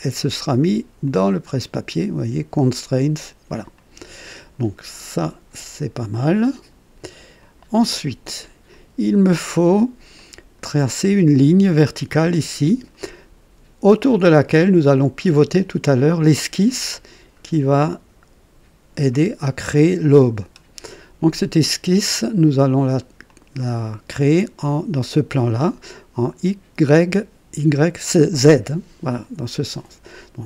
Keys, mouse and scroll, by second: 1.0 click, 3.7 click, 6.1 click, 7.4 click, 8.7-10.0 drag, 10.1 click, 12.3 click, 14.1 click, 22.0 click, 23.3 click, 23.8 right click.